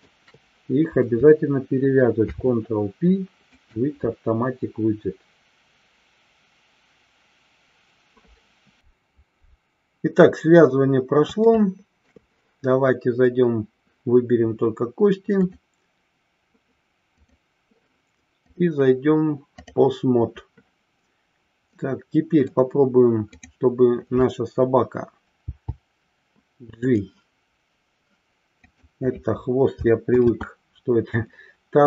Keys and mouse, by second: 2.1 ctrl+p, 11.5-12.0 shift+middle drag, 18.5-19.8 drag, 21.6-22.4 middle drag, 23.3 click, 30.5 ctrl+z.